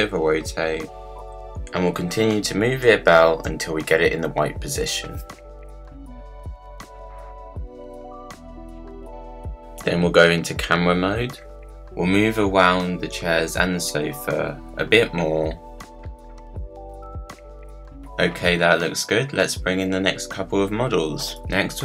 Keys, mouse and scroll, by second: 3.6 click, 4.5 click, 5.5 r, 7.2 click, 8.0 click, 8.4 click, 9.8 click, 12.3 click, 15.7 click, 15.8 scroll down 1, 16.8-18.4 drag, 18.9 click.